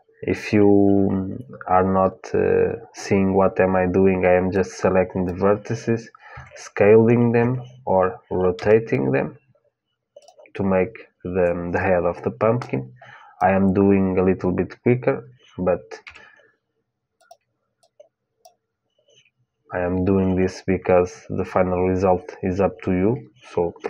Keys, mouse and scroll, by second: 4.3-6.3 drag, 6.1 s, 8.3 r, 12.3-15.8 drag, 15.8 g, 17.5-20.1 drag.